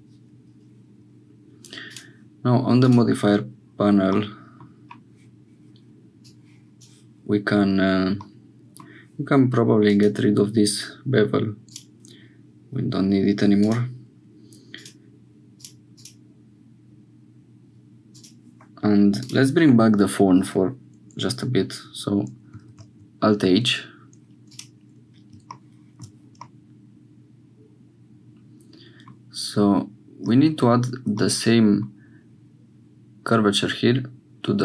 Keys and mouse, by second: 1.8 click, 2.8-4.7 drag, 6.2 click, 8.2 click, 9.9 click, 11.6 click, 13.6 click, 14.7 click, 15.9 click, 18.1 click, 22.8 alt+h, 24.4 click, 25.8 shift+click, 26.4-29.1 drag, 31.2 click.